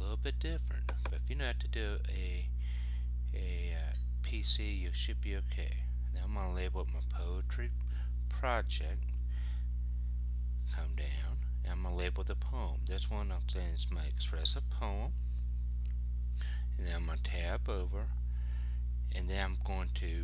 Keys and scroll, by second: 3.0 shift+m, 4.5 shift+p, 6.8 shift+p, 9.1 Return, 15.3 shift+p, 16.7 Tab, 20.0 super+v.